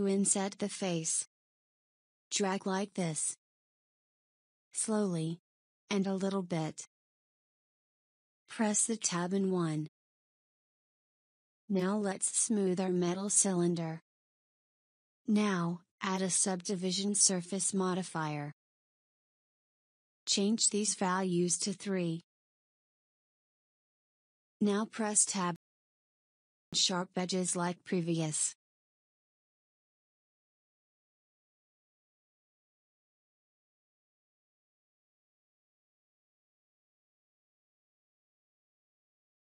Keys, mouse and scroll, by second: 8.5 Tab, 8.9 KP_1, 10.1 scroll down 1, 10.9-11.6 scroll down 1, 11.7-12.6 scroll down 1, 12.6 scroll up 3, 13.8 click, 15.0-16.8 middle drag, 18.7-20.5 drag, 20.9 click, 22.0 click, 24.7 Tab, 27.2 ctrl+r, 30.8 ctrl+r, 33.6-35.1 middle drag, 35.1-35.8 scroll up 3, 35.8-36.5 scroll up 1, 36.9-38.4 middle drag, 38.4 click, 38.9 middle click.